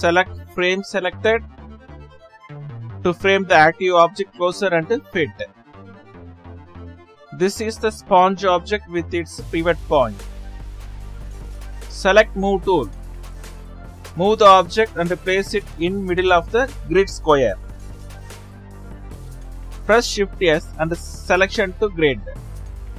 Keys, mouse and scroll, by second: 0.1-5.0 drag, 5.7 click, 10.5-13.1 drag, 15.5-16.0 scroll down 2, 16.0-16.3 scroll up 3, 16.3 right click, 16.6-17.0 scroll down 1, 22.5 shift+s.